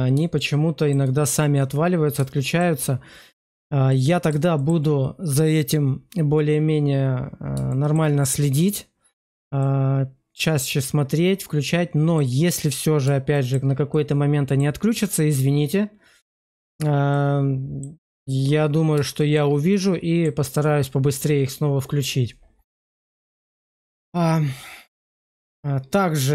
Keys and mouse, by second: 0.3-0.8 shift+middle drag, 1.5 middle click, 2.3 shift+middle click, 3.8 middle click, 4.5 shift+middle click, 7.6 shift+middle drag, 9.5-12.1 middle drag, 13.2 shift+middle click, 13.8 middle click, 17.0 middle click, 19.1 shift+middle click, 19.6 middle click, 25.2-26.3 middle drag.